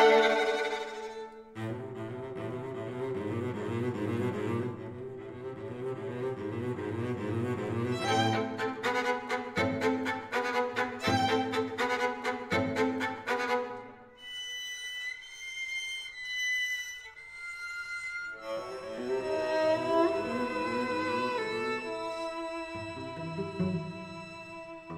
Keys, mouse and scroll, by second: 7.4 KP_5, 8.0 KP_1, 9.7 z, 11.6-13.1 middle drag, 13.1 Tab, 13.9-18.3 right drag, 14.5 Tab, 18.3 middle click, 20.4-24.9 shift+right drag.